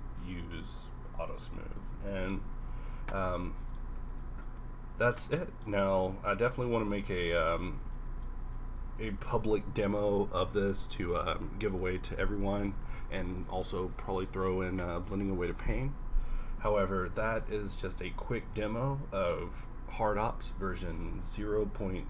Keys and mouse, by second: 5.7 a, 6.9-11.1 middle drag, 16.9 shift+z.